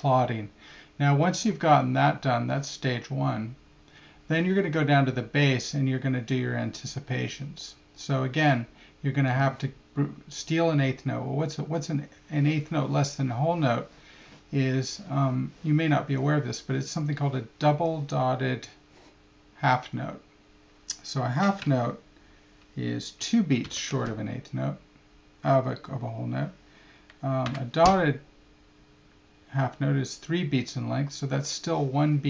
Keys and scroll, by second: 23.6 alt+§.